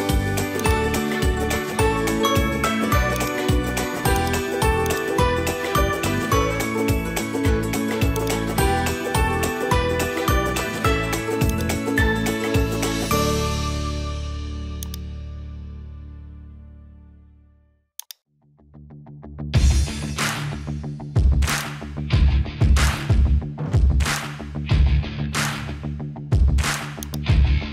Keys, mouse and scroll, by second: 0.2 Tab, 0.6 click, 2.0 shift+s, 4.1 click, 4.6 Tab, 5.2 shift+a, 9.0 s, 12.5 s, 16.0 s, 18.5-19.8 middle drag, 21.0 alt+h, 21.5 click, 22.0-23.8 middle drag, 27.0 click.